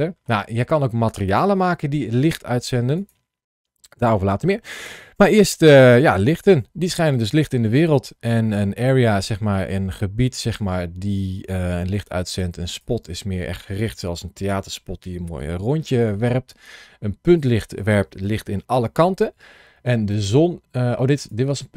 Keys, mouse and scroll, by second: 1.0 click, 2.8 click, 7.2 middle click, 9.4 click, 12.6 click, 17.2 click, 19.9 click.